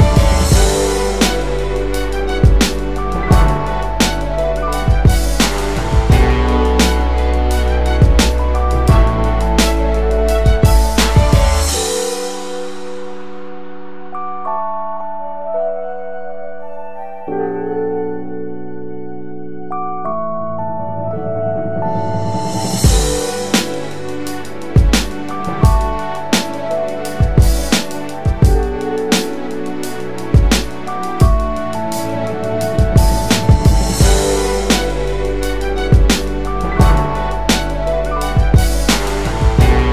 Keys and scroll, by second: 15.5 5, 16.2 Tab, 16.7 5, 18.9 Return, 26.9-28.1 ctrl+space, 28.1 space, 28.7 space.